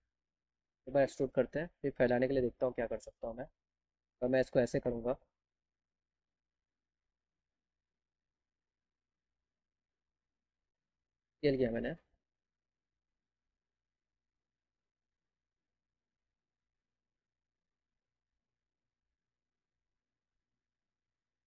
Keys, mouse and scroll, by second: 0.4 right click, 2.0 click, 2.4 scroll down 2, 3.7 click, 4.0 right click, 4.6 click, 11.7-13.4 drag, 15.9-17.2 drag.